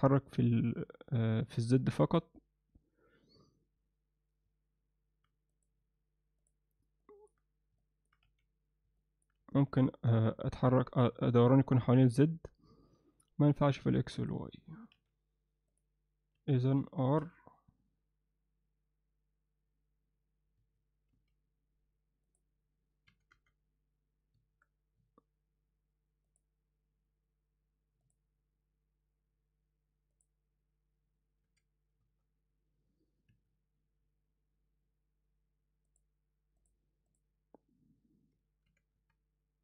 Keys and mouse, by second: 5.7 click, 7.1 middle click, 7.8 alt+middle click, 8.3 z, 9.0 alt+middle click, 9.4 z, 9.9 middle click, 14.0 click, 15.0 z, 16.4 z, 17.2 r, 21.2 z, 22.3 click, 23.1 r, 26.4-28.2 drag, 30.2 click, 31.5 r, 36.6-37.2 drag, 38.7 r.